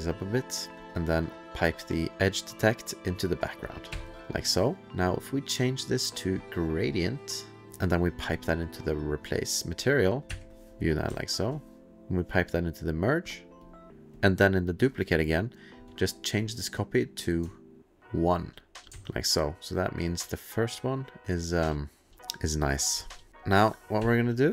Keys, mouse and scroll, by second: 0.0 click, 0.8 click, 0.8 click, 0.9 click, 3.7 click, 3.9 1, 5.1 click, 8.0 click, 9.7 click, 10.2 1, 11.2 alt+middle click, 12.3 click, 13.7 click, 14.1 1, 14.2 click, 16.4 click, 18.0 ctrl+click, 18.4 ctrl+click, 19.0-22.5 alt+scroll, 22.6-23.2 alt+middle click, 23.3 ctrl+s, 23.3 click, 24.0 1.